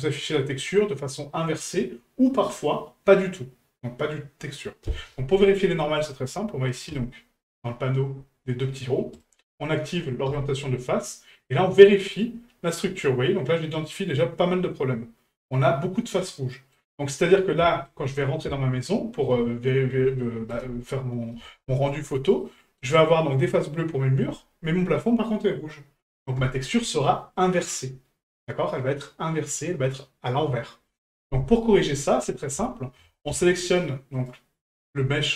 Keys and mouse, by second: 7.1-8.1 drag, 9.2-10.7 drag, 11.1-16.7 middle drag, 17.6 shift+middle drag, 18.5-19.2 shift+middle drag, 20.2 shift+middle drag, 21.9 middle click, 22.4 middle click.